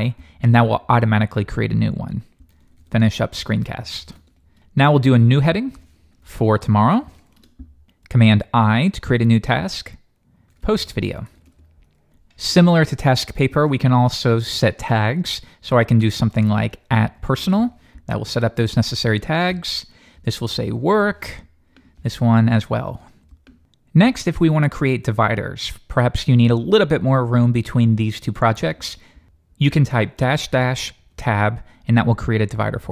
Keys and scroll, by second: 8.3 super+i, 31.1 Return.